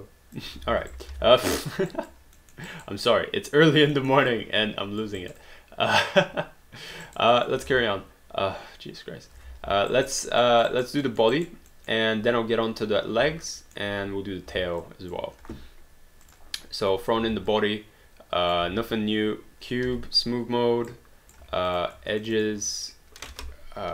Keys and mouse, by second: 0.7 ctrl+z, 1.0 alt+right click, 1.1 alt+d, 1.4 alt+click, 1.9 alt+right click, 2.4 alt+middle click, 2.7 alt+right click, 3.1 alt+click, 4.0 alt+middle click, 4.4 alt+click, 5.2 alt+right click, 5.4 alt+click, 7.1 alt+right click, 7.4 alt+click, 7.7 space, 9.4 space, 9.9 alt+right click, 10.4 alt+middle click, 10.7 alt+right click, 11.1 alt+middle click, 11.4 alt+right click, 12.1 alt+middle click, 13.6 alt+middle click, 14.8 alt+click, 16.3 click, 17.2 r, 17.5 click, 19.9 3, 21.1 right click, 21.4 q, 21.7 click, 22.2 shift+click, 23.2 click.